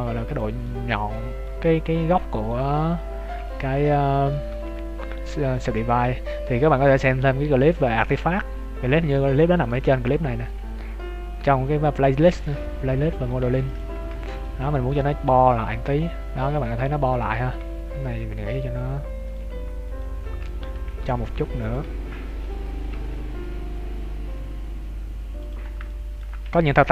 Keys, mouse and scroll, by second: 0.6 middle click, 1.9 middle click, 1.9 scroll down 3, 2.6 scroll up 1, 3.5 alt+right click, 3.9 middle click, 4.5 g, 8.4 scroll down 1, 9.2 alt+right click, 9.2 scroll down 1, 9.5 scroll up 1, 10.2 scroll up 1, 10.2 g, 12.4 middle click, 13.5 ctrl+s, 14.0 Tab, 14.1-14.4 scroll down 3, 14.3 scroll up 1, 14.4 middle click, 16.7 Tab, 17.1 middle click, 19.2 right click, 19.9 alt+right click, 20.1 alt+right click, 20.3 scroll up 2, 20.7 super+g, 22.2 alt+right click, 22.9 g, 25.6 scroll down 1, 25.8 shift+middle click.